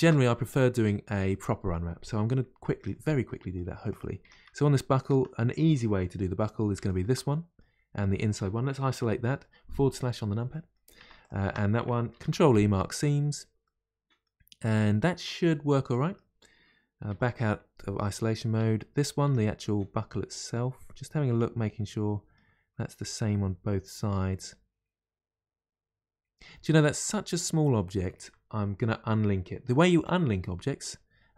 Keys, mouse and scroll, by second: 0.0 ctrl+space, 0.6-1.3 scroll up 2, 1.4-3.3 middle drag, 3.3-5.7 middle drag, 5.7-6.7 scroll up 1, 7.3-8.9 middle drag, 8.9 KP_Divide, 17.1 KP_Divide, 17.7-18.6 scroll down 1, 18.6 Tab, 19.6-31.3 middle drag.